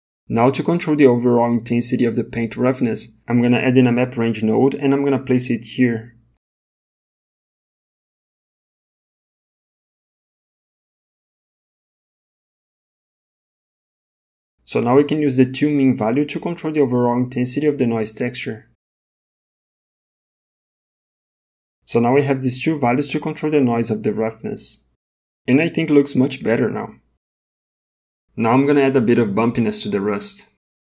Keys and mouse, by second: 0.0 ctrl+shift+click, 6.5 shift+a, 12.4 middle click, 13.2 middle click, 13.7 middle click, 15.7-21.0 drag, 23.4-25.2 drag, 28.5 middle click, 30.2 click, 30.7 g.